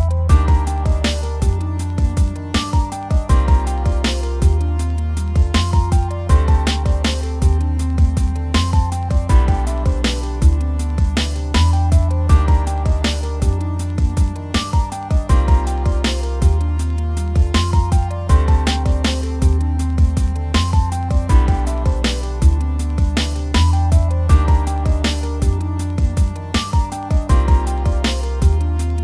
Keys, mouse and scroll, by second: 0.1 middle click, 0.3 f, 0.5 scroll up 1, 0.7 f, 0.8 middle click, 1.3-2.8 drag, 2.8 f, 3.1 click, 3.5 scroll down 2, 3.6 shift+middle click, 3.7 scroll up 1, 4.0 shift+middle click, 4.8 scroll up 1, 5.0 f, 5.2 middle click, 5.4 f, 5.7 shift+middle click, 6.6 f, 7.1-8.6 drag, 10.4 shift+middle click, 10.9 f, 11.2-12.6 drag, 12.6 scroll down 3, 12.7 middle click, 13.1 scroll up 1, 13.2 middle click, 13.6-14.0 scroll up 1, 14.0 middle click, 14.2 scroll up 1, 14.4 click, 15.0 ctrl+z, 15.4 click, 16.3 f, 16.5 f, 16.8 scroll up 1, 17.0 click, 17.4 scroll down 1, 17.5 click, 18.4 scroll down 1, 18.5 click, 19.0 middle click, 19.2 click, 19.6-20.9 shift+middle drag, 20.9 f, 21.1 scroll up 2, 21.2 middle click, 21.4 click, 22.0 shift+middle click, 22.1 click, 22.7 scroll up 1, 22.7 scroll down 1, 22.8 shift+middle click, 22.9 scroll up 1, 23.0 click, 23.3 scroll down 1, 23.4 shift+middle click, 23.5 scroll up 1, 23.6-25.8 drag, 25.8 scroll up 1, 26.0 click, 26.4 middle click, 27.0 click, 27.3 middle click, 27.4 click, 28.1 scroll down 1, 28.2 middle click, 28.7 click.